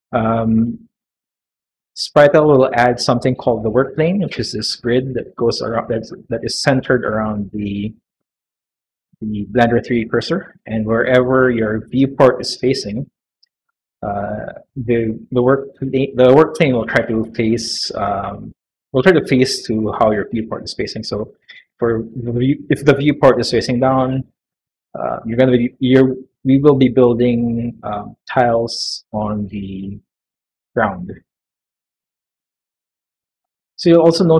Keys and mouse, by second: 3.5-5.5 middle drag, 5.7-24.6 middle drag, 27.7 click, 29.0 click, 29.5 click, 30.1 click, 30.5 click, 31.0 click, 31.5 click, 31.9 click, 32.3 click, 32.6 click, 33.1 click, 33.9 middle click.